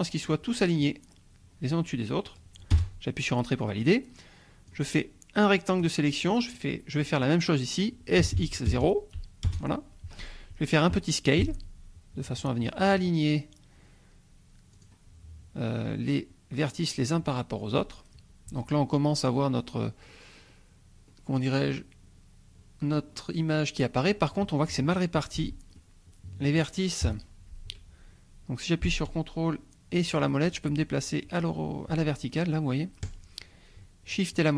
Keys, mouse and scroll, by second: 2.8 Return, 4.7-6.0 drag, 8.2 s, 8.4 x, 8.7 KP_0, 9.5 Return, 11.4 s, 14.7 click, 18.7 Tab, 19.0-19.5 scroll up 1, 19.6-19.9 scroll down 1, 20.1-20.7 scroll up 2, 21.1-21.5 scroll up 2, 21.5-23.3 scroll down 6, 23.3 scroll down 1, 23.9 scroll up 2, 25.4 Tab, 25.8-26.7 drag, 27.1 1, 30.2-34.5 shift+drag.